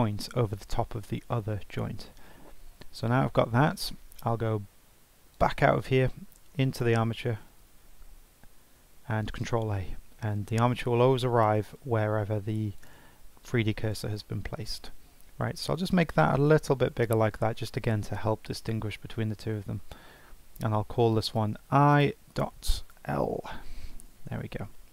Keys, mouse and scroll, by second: 5.3-6.9 drag, 7.4 Tab, 9.4 shift+a, 12.8 click, 15.3 s, 20.1 F2.